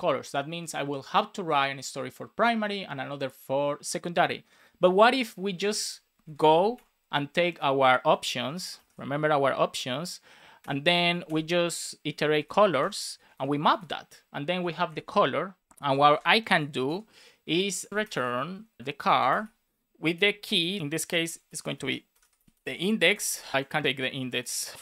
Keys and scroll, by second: 6.2 alt+shift+Left, 10.5 Return, 12.7 Return, 13.7 shift+9, 15.6 space, 15.9 shift+., 16.4 shift+[, 16.8 Return, 18.1-19.6 typing, 20.8-23.0 typing, 22.6 Right.